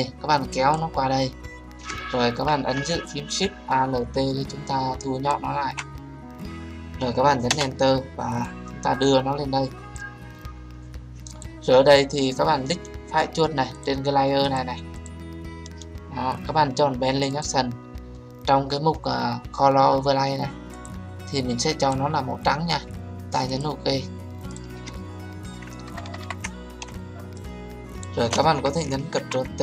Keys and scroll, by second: 7.4 Return, 29.1 ctrl+t.